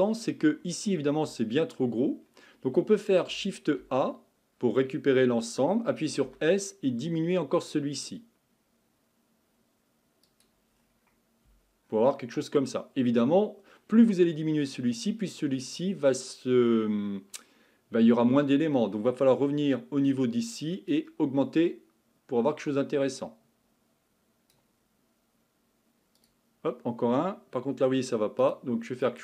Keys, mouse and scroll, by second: 0.5-1.2 scroll up 5, 1.2 Tab, 3.3 a, 3.8 a, 6.2 s, 10.8-11.5 scroll down 5, 11.5 Tab, 12.1-13.7 scroll up 2, 13.7-14.7 scroll down 1, 20.9-24.0 drag, 26.2-29.2 drag.